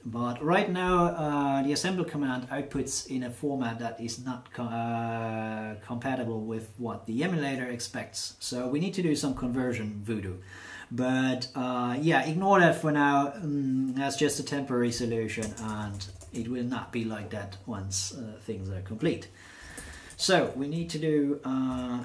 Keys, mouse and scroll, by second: 15.4 BackSpace, 15.5 BackSpace, 15.6 BackSpace, 15.8 BackSpace, 19.3-20.6 typing, 21.7 shift+<.